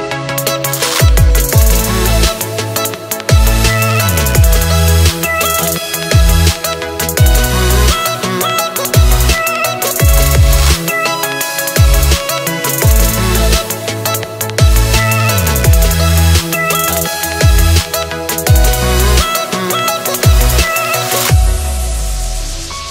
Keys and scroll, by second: 17.0 space, 17.5-17.9 alt+super+space, 18.0 alt+super+space, 18.1 alt+super+space, 18.3 alt+super+space, 18.4 alt+super+space, 18.5 alt+super+space, 19.2 super+space, 20.6 space, 21.1 super+space, 21.2 super+space, 21.2 super+space, 21.3 super+space, 21.8 super+space, 22.1 super+space, 22.2 super+space, 22.2 super+space.